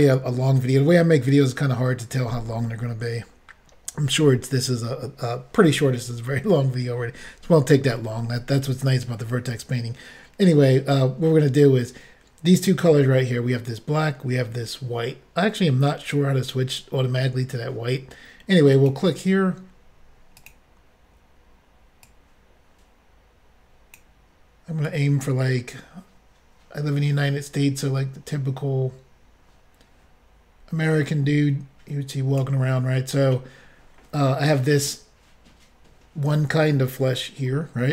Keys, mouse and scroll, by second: 18.7 click, 18.9 click, 20.5 click, 22.0 click, 24.9 click.